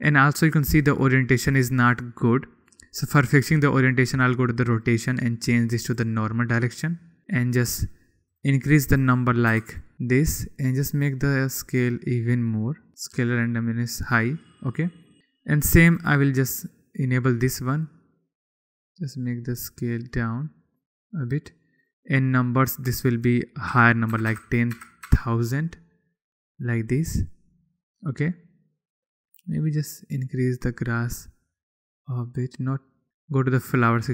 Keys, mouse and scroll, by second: 0.6-1.0 middle drag, 1.7 click, 2.6 click, 4.0-4.7 drag, 5.4-6.6 drag, 9.0 click, 11.7-14.6 drag, 15.2 middle click, 15.5 click, 16.6 click, 17.2 click, 18.0 click, 18.7-20.9 drag, 21.4 click, 24.9 0, 25.6 0, 27.5 click, 29.9-31.5 drag.